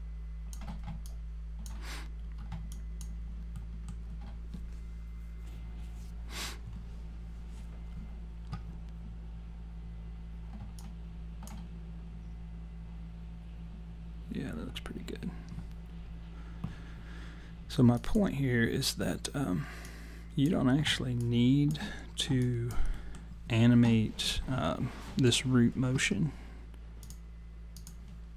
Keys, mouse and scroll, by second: 1.0 alt+click, 2.1 scroll up 2, 2.7 alt+click, 3.6 alt+middle click, 10.8 alt+click, 18.0 click, 19.9 click, 21.2 alt+click, 21.9 alt+click, 22.1-22.9 scroll down 3, 22.4 alt+click, 22.9 alt+middle click, 27.0 click, 27.7 click.